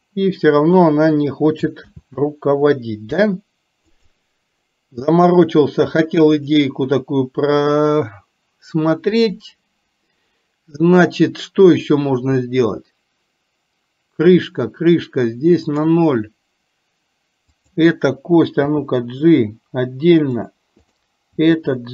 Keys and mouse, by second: 1.9 ctrl+z, 6.4 click, 15.8 click, 17.5 click, 18.8 g, 20.9 click, 21.5 g.